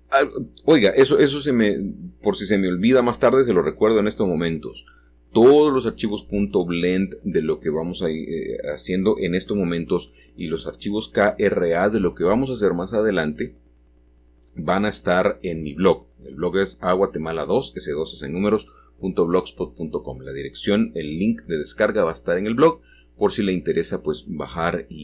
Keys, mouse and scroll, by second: 2.5-4.3 shift+middle drag, 6.4 click, 6.9-8.9 scroll down 1, 9.1 g, 11.5-14.7 drag, 11.9-13.3 scroll up 1, 13.3-14.7 scroll up 1, 16.7 click, 20.5 click, 21.0-24.2 middle drag, 24.2 1.